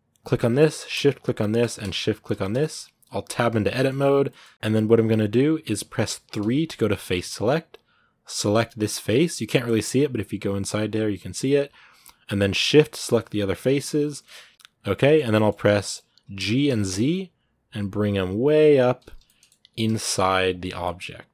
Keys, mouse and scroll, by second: 2.4 shift+middle click, 3.0 Tab, 3.5-4.5 middle drag, 4.5-6.1 scroll up 1, 6.1 3, 8.3 right click, 8.8 middle click, 9.4 scroll up 2, 9.6-11.0 middle drag, 11.0 scroll down 1, 11.2-12.9 middle drag, 12.9-14.0 shift+right drag, 14.0 middle click, 14.5 scroll up 1, 14.6 scroll down 2, 14.7 middle click, 15.3 scroll up 1, 15.5 middle click, 16.2 g, 19.0 middle click, 19.5 g, 20.6-21.3 middle drag.